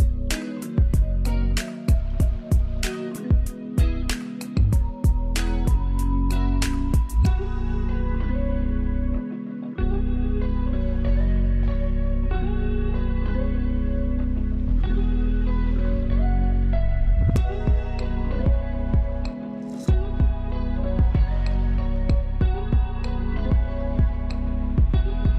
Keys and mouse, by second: 21.8 ctrl+space, 22.1 ctrl+click, 22.3 ctrl+space, 23.3-25.3 drag.